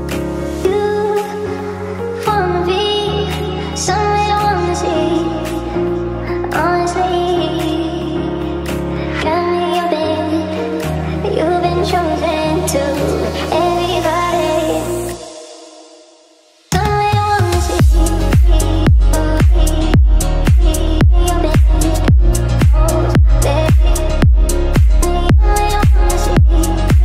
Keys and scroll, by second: 22.3 c, 22.6 e.